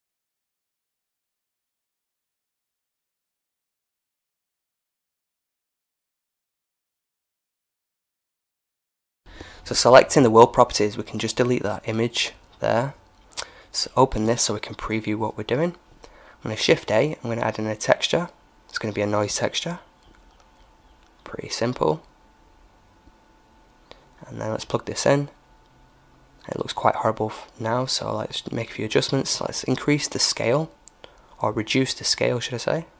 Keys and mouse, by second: 0.0 Escape, 6.1-11.3 drag, 10.4 x, 13.1-14.9 drag, 15.1 shift+a, 23.8-25.7 drag, 25.3-29.4 middle drag, 26.9-30.3 drag.